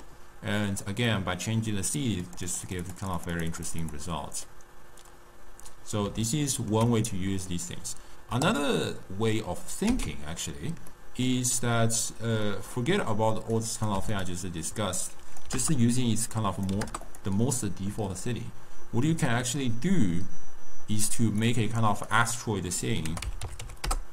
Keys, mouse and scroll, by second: 2.2-4.4 drag, 4.4-8.4 middle drag, 8.4 click, 10.4 x, 10.9-13.5 middle drag, 13.5 click, 14.9-17.1 drag, 19.4-24.1 drag.